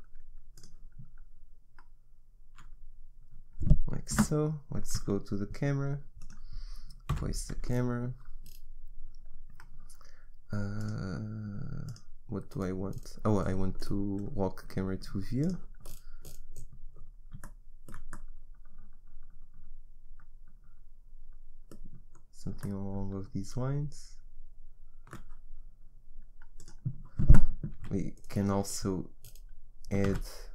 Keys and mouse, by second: 4.2 KP_0, 7.2 n, 16.6 middle click, 18.6 middle click, 26.6-28.4 drag, 27.9 a, 28.4 middle click, 29.4 click, 30.2 shift+a.